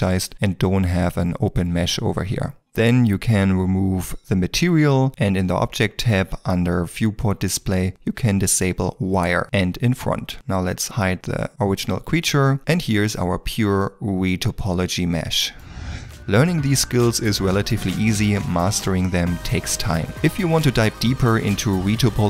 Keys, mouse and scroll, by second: 2.2 ctrl+middle click, 7.4 scroll down 1, 12.5 scroll up 1, 12.6 middle click.